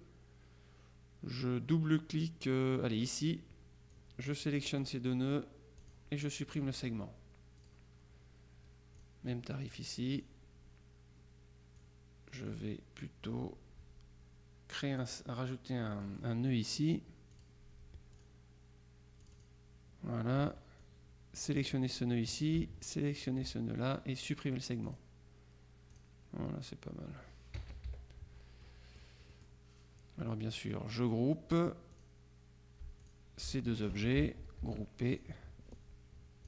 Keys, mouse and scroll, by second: 3.0 click, 4.0-5.4 drag, 5.9 click, 6.6 click, 7.7 click, 9.0 click, 10.2 click, 11.8-13.1 drag, 15.1 click, 16.0 click, 17.4 click, 18.2 click, 19.3 click, 20.9-22.0 drag, 23.2 shift+click, 25.0 click, 26.0 click, 27.7 KP_Subtract, 28.7-30.0 middle drag, 31.1 click, 32.0 click, 33.1 shift+click, 34.7 ctrl+g, 35.2 ctrl+click, 36.0-36.4 drag.